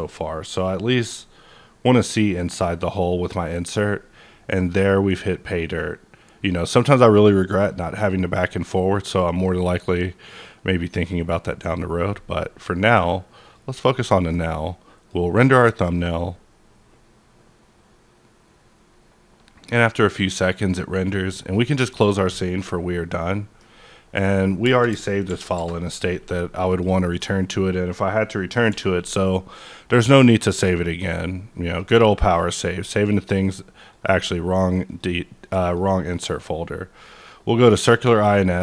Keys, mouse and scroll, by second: 0.4-0.8 scroll up 2, 3.1 click, 3.1 scroll up 1, 13.4 click, 14.6-17.4 drag, 21.3-23.0 drag, 23.0 scroll down 1, 23.2 middle click, 25.3 ctrl+n, 25.5 Return, 26.7 click, 27.7-28.1 scroll up 2, 28.1-30.0 middle drag, 28.7 n, 30.0 click, 30.9 click, 31.6 click, 32.3 click, 34.8 click, 34.9 click, 35.5 click, 37.2 click, 37.6-37.9 scroll down 1, 37.9 middle click, 38.5 scroll up 1.